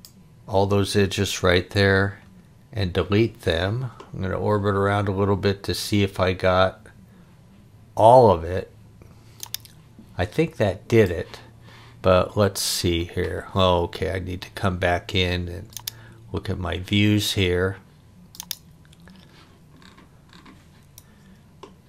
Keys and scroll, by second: 1.7 Delete.